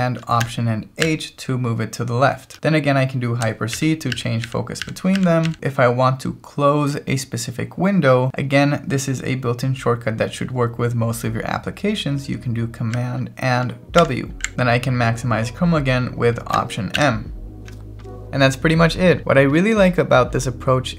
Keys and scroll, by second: 1.0 alt+h, 3.7 ctrl+alt+shift+super+c, 13.9 super+w, 14.5 Return, 16.9 alt+m.